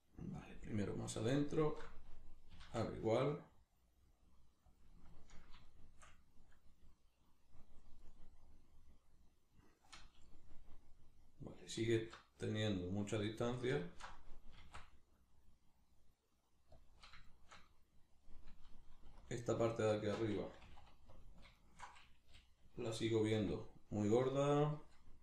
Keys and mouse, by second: 0.5 click, 0.9 alt+right click, 1.5 alt+shift+right click, 2.5 s, 4.8 click, 5.1-13.3 ctrl+middle drag, 11.9 alt+q, 13.3 alt+right click, 13.8 alt+shift+right click, 14.5 s, 16.9 click, 17.3-19.2 shift+middle drag, 19.2 alt+right click, 19.6 alt+right click, 20.5 g, 21.3 alt+click, 21.5 alt+shift+right click, 22.3 g, 24.3 click.